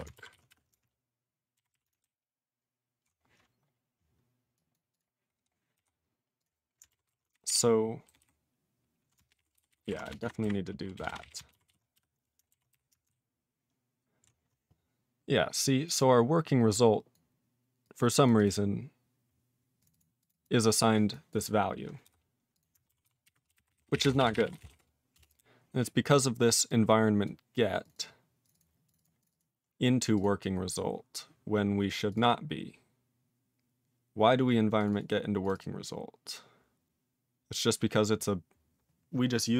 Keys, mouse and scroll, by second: 0.0-0.5 typing, 5.8 q, 6.4 click, 6.4 click, 7.1 ctrl+s, 7.3 alt+b, 7.5 alt+b, 8.1 alt+b, 8.2 alt+b, 10.0-11.3 typing, 11.7 ctrl+s, 22.0 q, 22.5 click, 22.6 click, 23.0 ctrl+s, 23.2-25.2 typing, 26.7 click, 27.2 click, 27.8 click, 27.9 click, 27.9 double click, 28.0 double click, 28.4 click, 28.5 click, 28.5 double click, 28.6 double click, 28.9 click, 28.9 click, 29.0 double click, 29.0 double click, 29.2 click, 29.3 double click, 29.4 double click, 30.1 click, 30.2 click, 30.6-30.9 scroll up 2, 32.1 click, 32.1 click, 32.2 double click, 32.3 double click, 34.8 click, 34.8 click, 34.9 double click, 35.0 double click, 35.4 click, 35.5 click, 35.5 double click, 35.6 double click.